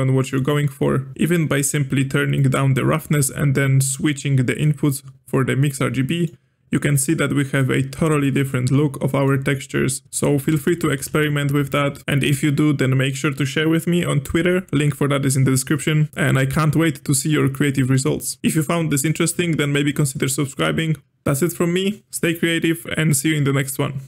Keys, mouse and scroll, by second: 2.4-4.0 drag, 6.0-7.9 middle drag, 7.9-8.2 scroll up 1, 8.2-10.0 shift+middle drag, 10.0 ctrl+z, 10.5 ctrl+z, 10.9 ctrl+z, 11.1 ctrl+z, 11.6 ctrl+z, 18.4-18.7 drag, 18.7-21.0 middle drag.